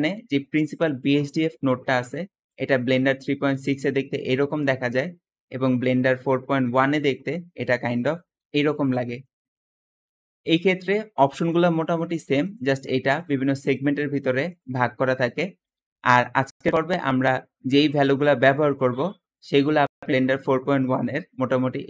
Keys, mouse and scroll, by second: 0.6 click, 1.0-1.9 scroll down 2, 2.4 middle click, 2.8-3.8 scroll down 2, 3.4 g, 4.0 right click, 4.5 middle click, 4.5 scroll down 2, 6.6 middle click, 7.2-8.9 scroll down 2, 8.2 g, 8.6 middle click, 15.0 middle click, 15.4-15.8 scroll up 2, 18.8-21.6 middle drag, 18.8 scroll up 2, 19.1-21.4 scroll down 3, 21.4 scroll down 1, 21.6 click.